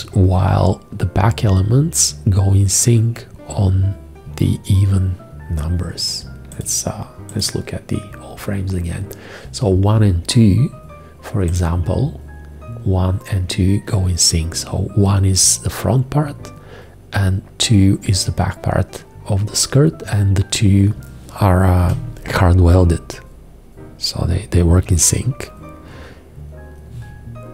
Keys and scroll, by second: 21.5 g.